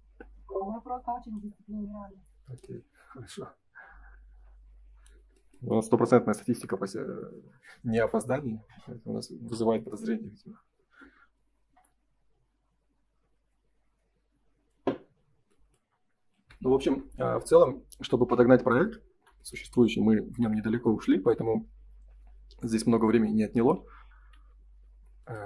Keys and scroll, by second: 6.3 ctrl+s, 16.3 ctrl+s, 24.1 F3.